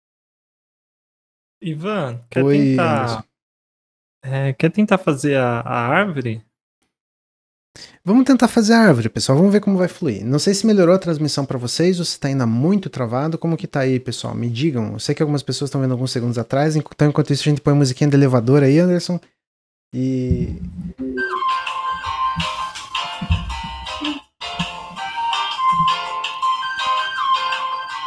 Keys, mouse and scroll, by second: 6.7 click.